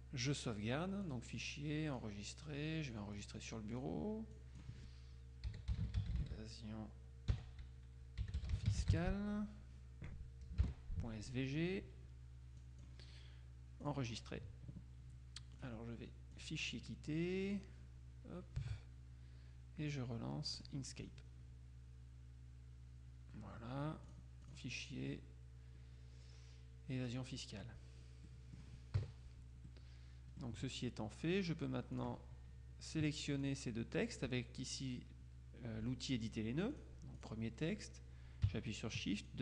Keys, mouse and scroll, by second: 1.2 click, 2.0 click, 3.2-5.2 drag, 5.3-6.8 typing, 8.1-9.6 typing, 12.7 click, 13.9 click, 15.7 click, 16.4 click, 17.5 click, 20.6 click, 24.2 click, 27.2 click, 28.4 middle click, 29.1 KP_Subtract, 29.8 middle click, 29.9 click, 32.0 click, 33.5 click, 36.8 click, 39.3 shift+click.